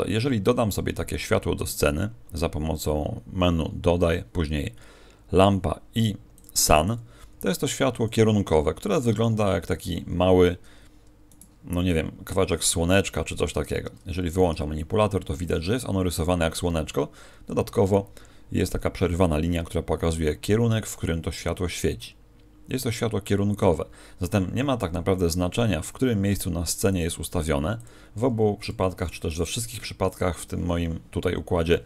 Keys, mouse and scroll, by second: 26.2 scroll down 4, 26.4 g, 27.3 g.